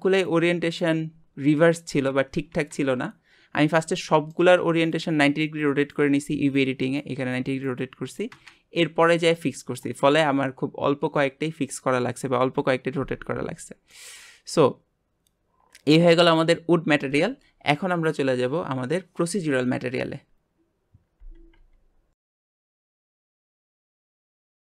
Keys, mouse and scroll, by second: 6.7-12.8 middle drag, 16.8-24.8 middle drag.